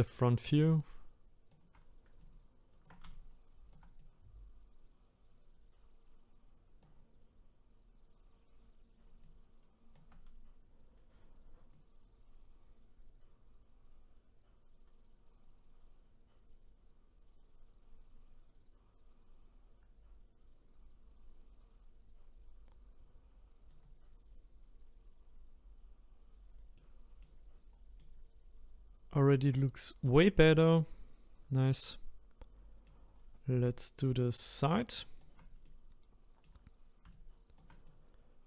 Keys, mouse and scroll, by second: 11.7-14.7 drag, 26.8 middle click, 27.5-28.0 scroll down 2, 28.0-31.0 middle drag, 32.8 middle click, 33.7-35.6 shift+right drag, 35.6-37.1 middle drag, 37.1-38.4 shift+right drag.